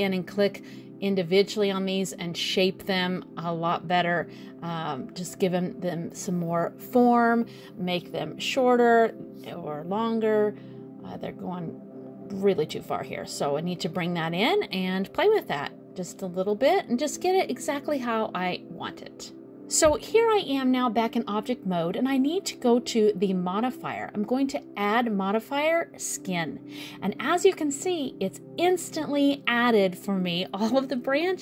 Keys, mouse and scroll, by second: 1.6 shift+click, 2.2 shift+click, 3.1 shift+click, 3.8 click, 6.0 click, 7.5 middle click, 9.3 middle click, 10.3 middle click, 11.7 click, 12.1 middle click, 12.9 click, 14.1 middle click, 15.7 middle click, 16.7 click, 17.6 middle click, 18.7 click, 21.7 click, 22.6 click, 27.0 middle click.